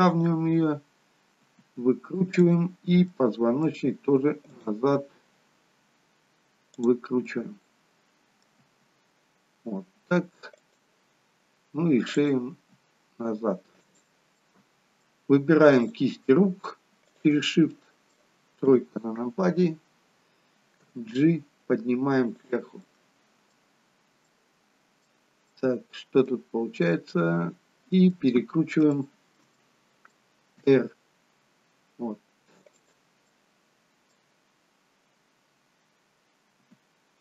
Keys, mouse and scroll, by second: 1.5 r, 3.0 middle click, 6.1 click, 6.7 click, 7.2 middle click, 8.6 r, 12.2 click, 12.6 r, 14.5 middle click, 15.9 click, 17.1 shift+click, 17.7 middle click, 18.6 KP_3, 19.8-20.9 scroll down 2, 20.9 g, 22.9 middle click, 24.3 middle click, 26.6-27.1 scroll up 1, 27.1 middle click, 29.0 shift+middle click, 29.7 middle click, 30.7 r, 33.3 middle click, 36.7 r.